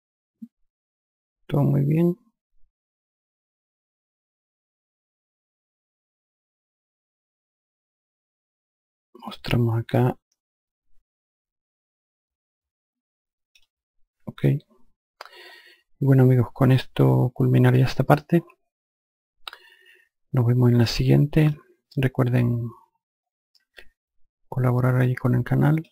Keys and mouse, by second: 6.9 click, 10.2 alt+click, 18.1 alt+click, 24.0 alt+click.